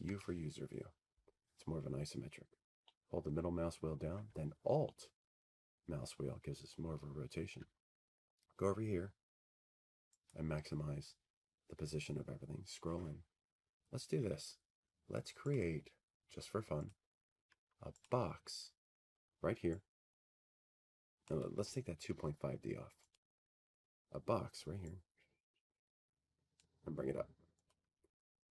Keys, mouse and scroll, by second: 2.7 c, 3.9 p, 5.6 4, 6.8 middle click, 6.8 u, 6.9 middle click, 9.5 middle click, 12.9 alt+middle click, 16.0 click, 18.2 middle click, 18.4-28.5 middle click, 21.2 click, 22.5 click, 23.7 click, 26.8 click, 27.2 Escape.